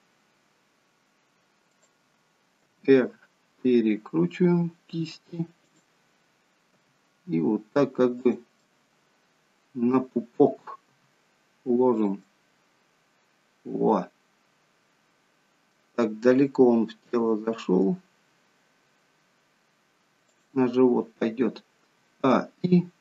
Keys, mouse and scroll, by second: 2.7 r, 6.9 g, 8.8 middle click, 11.1 r, 12.3 middle click, 17.1 g, 22.0 a, 22.3 i.